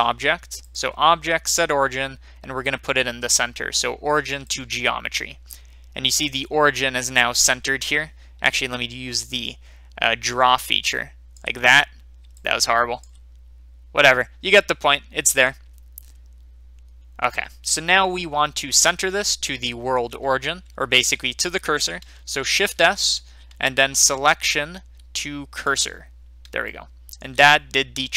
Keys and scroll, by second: 11.0-12.9 d, 13.1 d.